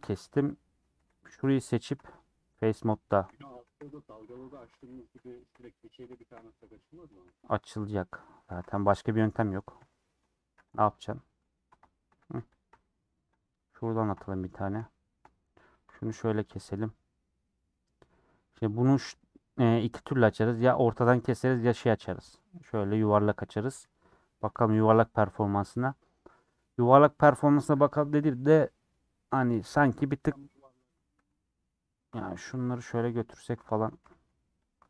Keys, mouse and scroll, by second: 1.1 c, 2.0 click, 2.4 scroll up 2, 2.9 shift+middle click, 3.7 c, 5.1 ;, 5.5 scroll down 1, 5.6-7.2 middle drag, 8.1 middle click, 8.5 3, 9.1 alt+click, 9.8 ;, 10.7 click, 12.1 a, 12.1 scroll up 1, 12.3 b, 12.7 u, 13.4 click, 14.7 shift+middle click, 15.7 2, 16.0 alt+Left, 17.1 middle click, 17.3 scroll up 1, 17.4-17.7 scroll down 1, 17.7 scroll up 2, 17.7 middle click, 17.9-21.4 middle drag, 21.4 a, 21.6 u, 23.1 3, 23.9 click, 24.7 l, 28.1-31.1 middle drag, 31.1 2, 32.2 alt+click, 32.5 g, 33.7 alt+click, 34.0 g.